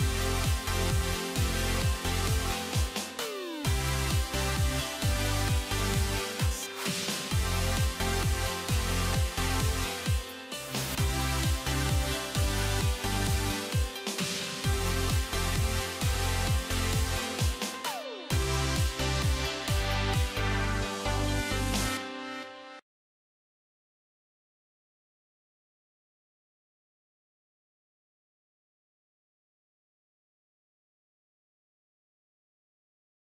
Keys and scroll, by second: 18.4 alt+x.